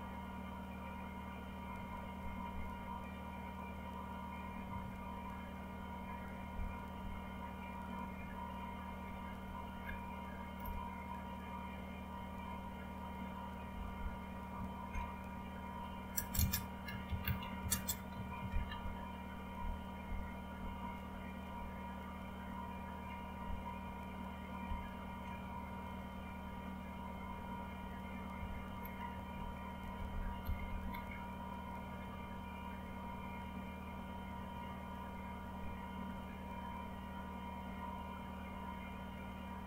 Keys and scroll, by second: 1.7 Page_Down, 8.6 Up, 9.0 Up, 9.4 Down, 9.7 Down, 10.6 Return, 16.8-19.2 typing, 24.7 ctrl+k, 28.4 Up, 28.6 Up, 29.1 Down, 29.6 Down.